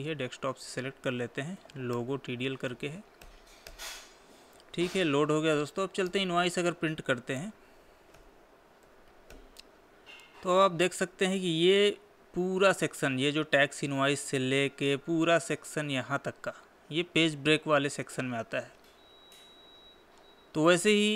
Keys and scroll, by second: 5.5 Escape, 7.8 ctrl+p, 9.3 Left.